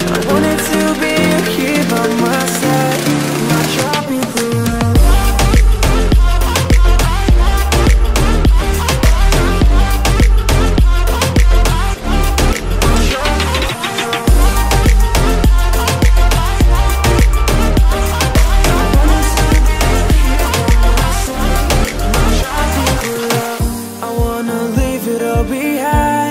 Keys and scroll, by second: 0.1 Return, 11.2 space.